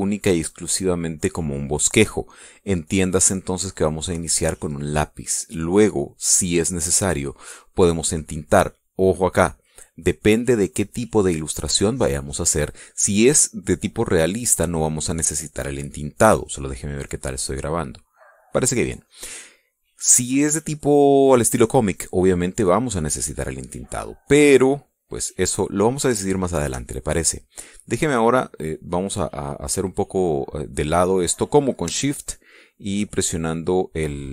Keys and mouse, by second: 7.3 click, 18.0 click, 19.5 click, 23.6 click, 27.7 shift+middle click, 33.1-34.3 shift+middle drag.